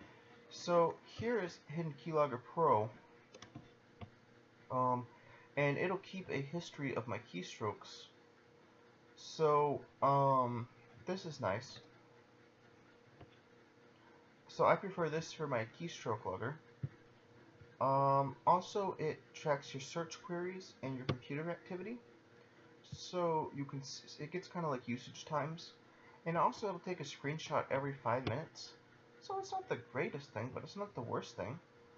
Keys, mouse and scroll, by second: 6.6 click, 17.1 click.